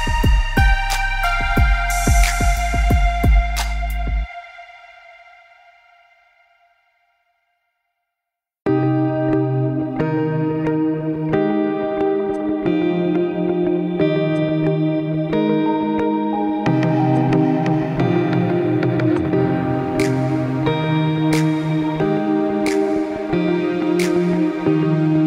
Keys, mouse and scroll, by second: 0.0 scroll down 2, 0.2 middle click, 1.0 r, 3.9 middle click, 4.4 scroll up 3, 4.6 middle click, 5.4 s, 6.5 g, 8.0 g, 10.8 middle click, 11.2-11.8 scroll up 3, 11.8 middle click, 12.4 click, 13.8 click, 14.4 click, 15.4 click, 17.6-19.1 scroll down 8, 18.3 click, 19.5 scroll down 2, 19.8 middle click, 20.4 click, 20.9 click, 22.5 click, 23.4 middle click, 24.1 middle click, 25.1 shift+click.